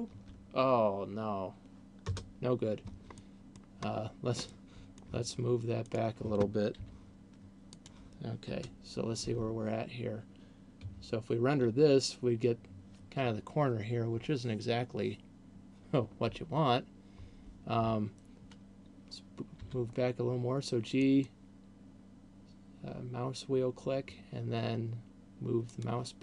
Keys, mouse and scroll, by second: 2.4 KP_0, 3.4 middle click, 4.4 scroll down 2, 4.6 middle click, 6.1 right click, 7.1 g, 8.1 click, 8.9 KP_0, 17.4 Escape, 19.9 g, 26.1 click.